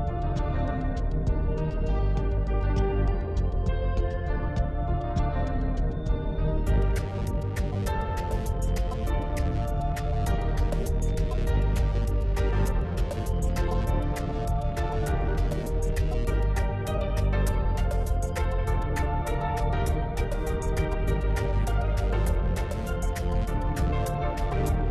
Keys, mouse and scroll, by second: 0.5 ctrl+r, 3.2 ctrl+r, 6.5-6.8 scroll up 2, 7.4 click, 8.9 3, 9.6 alt+click, 10.8 alt+click, 11.9 shift+click, 12.8-14.4 middle drag, 14.4 shift+click, 15.0 shift+click, 15.6 shift+click, 16.0-16.4 scroll down 2, 16.8-19.6 middle drag, 19.6 shift+click, 20.1-20.6 scroll down 3, 20.6-22.8 middle drag, 22.8-23.6 scroll up 4, 23.8-24.9 middle drag.